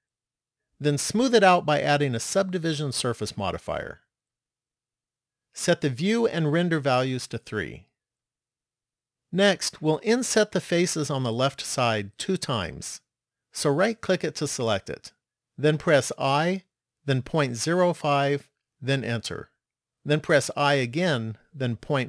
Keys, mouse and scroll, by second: 2.4 click, 6.8 click, 7.2 click, 8.0 click, 14.0 right click, 15.6 i, 20.1 i.